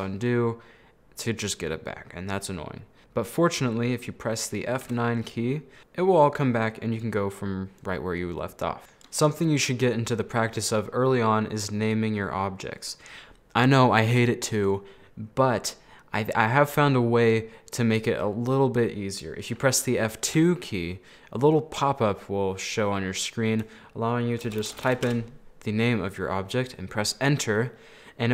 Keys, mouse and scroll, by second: 3.6-4.9 middle drag, 4.9 F9, 8.8-11.7 middle drag, 12.3-12.7 scroll up 1, 12.7 scroll down 2, 13.0-15.9 middle drag, 20.3 F2.